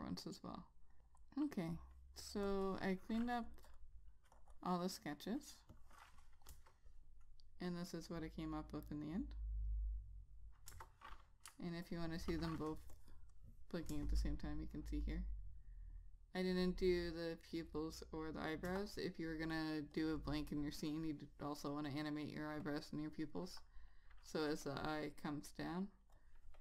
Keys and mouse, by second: 3.9 double click, 4.5 click, 6.7 Return, 10.9 Return, 11.9 ctrl+click, 12.0 ctrl+double click, 13.1 click, 18.8 Return, 20.1 click.